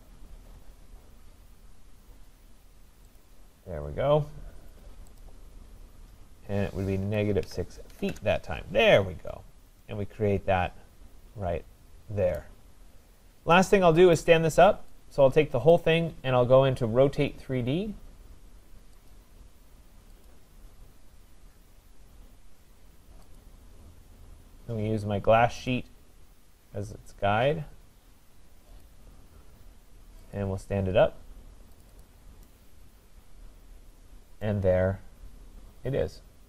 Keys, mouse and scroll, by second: 0.6-1.3 scroll, 3.2 click, 4.2 middle click, 5.2 click, 5.2-5.7 scroll, 5.9 middle click, 7.1-8.1 typing, 8.9-9.4 scroll, 9.4 middle click, 12.4 right click, 12.4-13.0 scroll down 13, 13.2-13.5 scroll up 4, 14.2 right click, 14.5 scroll, 15.7 click, 17.9-18.3 scroll up 4, 19.1 click, 21.0 scroll up 3, 21.0-21.6 scroll, 23.4 click, 23.6-23.9 scroll, 25.7 click, 27.0 scroll down 4, 27.6-27.9 scroll down 2, 28.9 click, 29.3-30.3 scroll, 30.4 click, 30.9 scroll, 31.8 click, 32.1 click, 33.7 middle click, 34.4 right click, 34.7 middle click, 34.7 middle click, 35.2 scroll, 35.5 middle click.